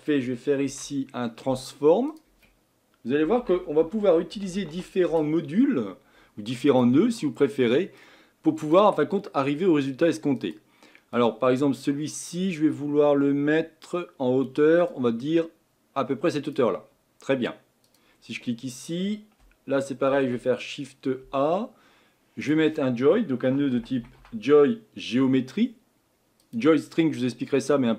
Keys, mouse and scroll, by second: 15.2-26.5 drag.